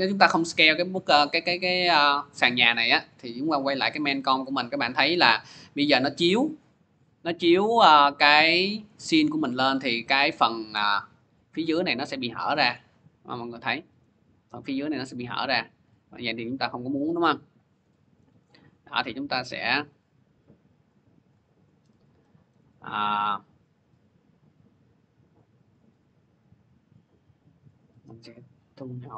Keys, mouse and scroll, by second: 3.1 click, 4.5 middle click, 5.4 scroll, 9.8 scroll, 12.5 click, 13.1-13.9 scroll, 13.9 scroll, 15.6 click, 16.9 click, 18.1 scroll, 18.9 middle click, 19.3 click, 20.7 click, 22.4 middle click, 22.7 middle click, 26.2-27.4 scroll.